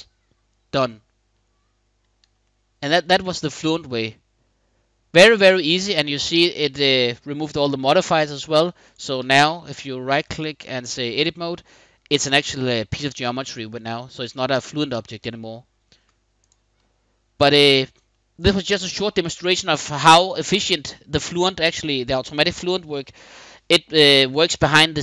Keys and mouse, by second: 2.2-5.3 middle drag, 8.1 middle click, 8.5 click, 8.9 Tab, 11.4-14.8 middle drag, 15.6 Tab, 16.5-17.4 middle drag, 17.8 middle click.